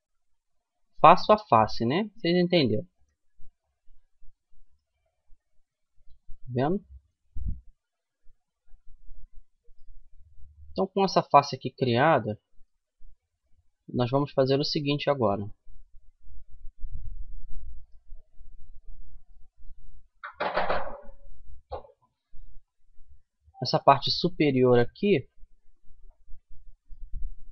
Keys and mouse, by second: 0.1 f, 0.8-2.3 middle drag, 2.3-3.6 drag, 3.2 right click, 3.6-7.1 middle drag, 7.8 f, 8.4-9.4 middle drag, 9.9 middle click, 11.0-13.8 middle drag, 14.7 a, 15.8 middle click, 21.3-22.8 middle drag, 27.4-27.5 drag.